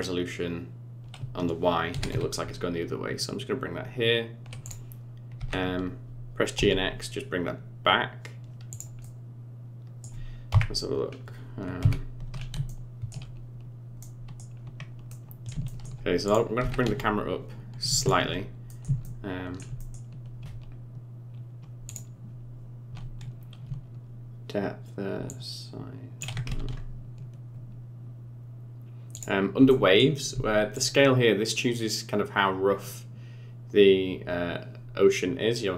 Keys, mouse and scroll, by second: 1.9 g, 5.3 g, 9.0 middle click, 10.4 KP_1, 11.0 scroll up 5, 11.7 KP_3, 12.3 scroll up 3, 12.6 shift+middle click, 14.0 middle click, 14.5 scroll down 5, 15.0 middle click, 15.6 shift+middle click, 16.2 click, 16.6 g, 18.6 middle click, 19.0 shift+middle click, 19.8 middle click, 21.8 click, 25.2 shift+click, 26.5 ctrl+z, 29.1 click, 29.6 middle click, 30.7 shift+click.